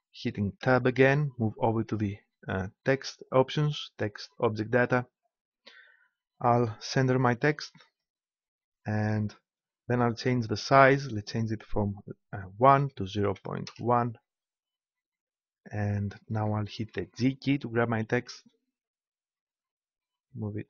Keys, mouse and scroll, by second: 0.6 Tab, 3.3-5.1 drag, 5.1-7.9 middle drag, 7.9-9.7 drag, 10.7-12.5 drag, 16.5-17.8 middle drag, 17.8 g.